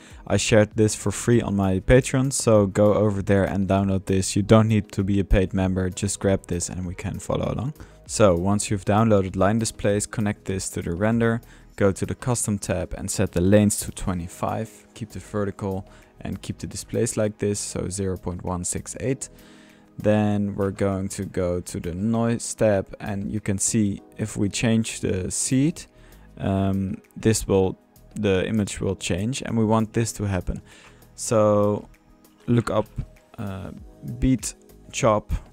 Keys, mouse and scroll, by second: 0.1-1.4 drag, 2.4-3.5 drag, 3.5-5.8 middle drag, 6.6 typing, 7.2-7.7 drag, 7.7-8.5 typing, 10.5-11.3 drag, 12.0 drag, 12.8-13.1 drag, 14.2 click, 14.5-15.3 drag, 20.0-21.1 drag, 20.1 Tab, 21.5-22.7 drag, 24.1 middle click, 24.6 click, 25.6-29.9 drag, 29.9-30.7 typing, 30.2 middle click, 30.5 drag, 30.8 Tab, 30.8 middle click, 31.5 drag, 32.0-33.3 typing, 33.7-35.3 drag.